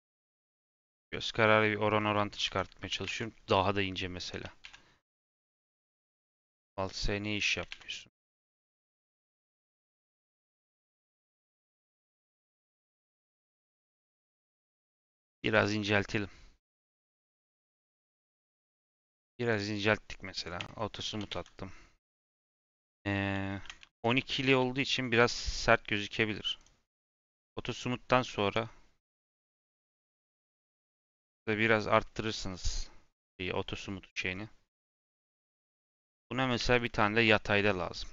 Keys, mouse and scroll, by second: 1.9 middle click, 2.4 Tab, 2.8 a, 3.0 alt+s, 4.6 alt+s, 6.8 click, 7.6 alt+s, 8.8 s, 17.2 Tab, 18.2 scroll up 2, 18.7 g, 19.6-20.7 right drag, 20.7 shift+middle click, 21.0 g, 23.4 shift+middle click, 23.6 scroll up 2, 23.7 Tab, 24.0 a, 25.1 Tab, 25.3-27.3 right drag, 27.8-29.5 right drag, 29.7 click, 30.7-32.4 drag, 32.4-32.7 scroll down 5, 32.9 scroll up 1, 33.9-34.6 scroll up 3, 34.6-34.9 scroll down 2, 34.9-35.3 scroll up 2, 35.3-36.5 shift+middle drag, 36.5 shift+d.